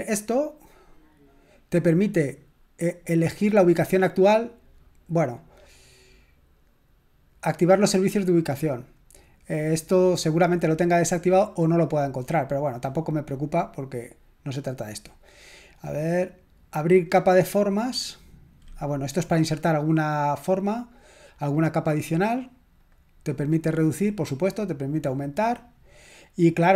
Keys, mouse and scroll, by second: 3.4 click, 8.8 click, 9.3 click, 13.3 click, 14.7 click, 15.7 click, 16.9 click, 19.7 click, 20.2 click, 21.4 click, 24.4 click, 25.2 click, 26.2 click.